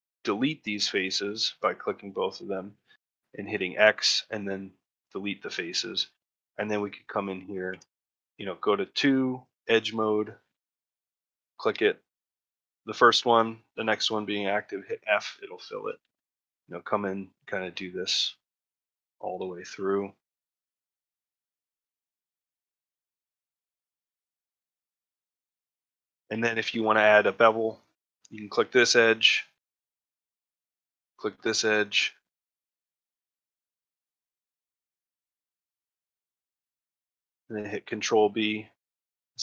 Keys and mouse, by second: 0.0 middle click, 1.2-2.2 middle drag, 5.6 middle click, 6.3 middle click, 7.5 2, 9.2 click, 9.6 middle click, 10.1 middle click, 10.4 middle click, 11.2 shift+click, 11.5 middle click, 15.2 middle click, 15.6 shift+middle click, 15.9 ctrl+middle click, 16.7 click, 17.1 middle click, 17.8 shift+click, 18.2 middle click, 18.7 middle click, 18.9 middle click, 19.3 middle click, 19.7 middle click, 21.3 click, 21.6 f, 21.9 middle click, 22.3 middle click, 22.7 middle click, 23.7 middle click, 24.4 shift+click, 24.8 f, 24.9 middle click, 25.4 ctrl+middle click, 25.6 shift+middle click, 25.8 middle click, 26.2 middle click, 26.5 ctrl+middle click, 27.9 middle click, 28.6 middle click, 29.2 middle click, 30.1 ctrl+middle click, 30.9 shift+click, 31.3 middle click, 32.0 shift+middle click, 32.3 middle click, 33.2 shift+click, 33.6 middle click, 34.1 middle click, 34.4 shift+middle click, 35.4 shift+click, 35.8 middle click, 36.4 ctrl+middle click, 36.7 shift+middle click, 37.2 ctrl+middle click.